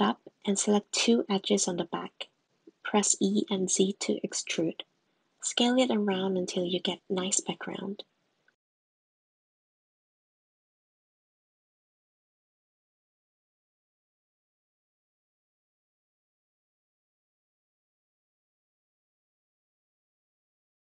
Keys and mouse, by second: 0.1 click, 0.4 Tab, 1.6 click, 2.1 click, 3.1 shift+click, 4.1 e, 7.5 shift+middle click, 8.1 shift+middle click, 8.7 g, 10.2 s, 12.4 s, 17.1 middle click, 18.1 middle click, 18.9 click, 19.8 g.